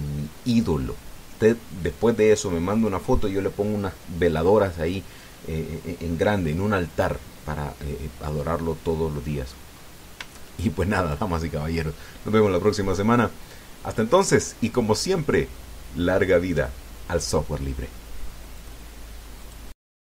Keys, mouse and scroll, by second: 9.2 scroll down 1, 9.6 middle click, 11.1 shift+middle click, 19.4 click.